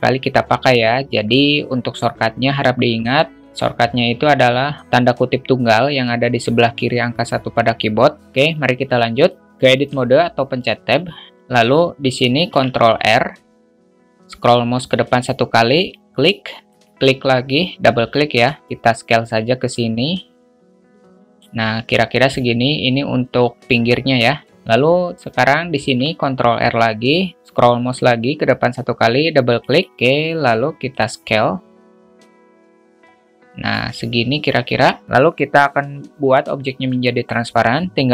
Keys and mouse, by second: 9.2 middle drag, 9.5 `, 9.7 Tab, 12.4 ctrl+r, 18.4-21.4 drag, 25.8 ctrl+r, 30.9-33.7 drag.